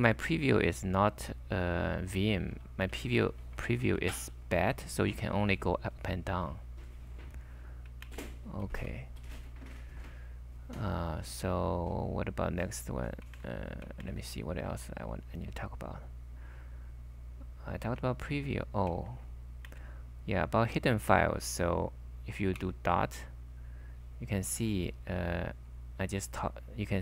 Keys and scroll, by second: 0.0 typing, 2.3-4.4 typing, 8.1 shift+Tab, 8.1-9.2 typing, 11.4 typing, 13.4 super+Tab, 14.0 super+Tab, 19.0 super+Tab, 25.2-25.5 typing.